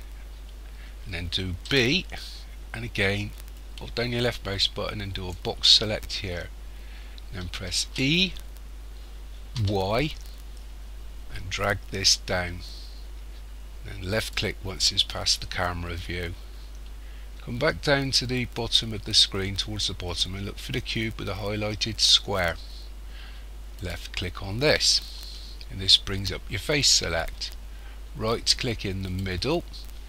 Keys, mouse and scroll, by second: 1.6 b, 7.8 e, 23.8 click, 29.0 right click.